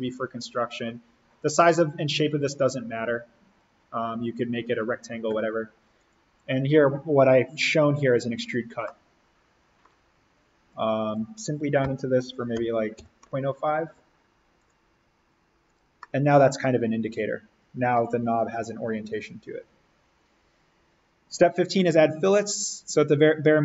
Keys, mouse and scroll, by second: 8.7 middle click, 8.9 scroll, 10.6 click, 11.7-13.4 typing, 14.5 click, 15.9 middle click, 16.0 scroll, 22.7 click.